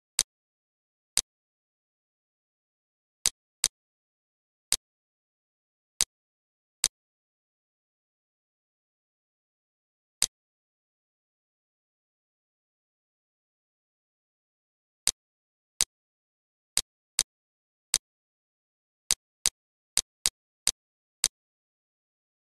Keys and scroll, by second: 1.6 z, 2.5 F2, 2.8 F1, 5.0 -, 5.3 space, 6.5 ctrl+d, 9.5 ctrl+d, 12.4 ctrl+d, 16.0 space, 20.8 space, 21.6 ctrl+d.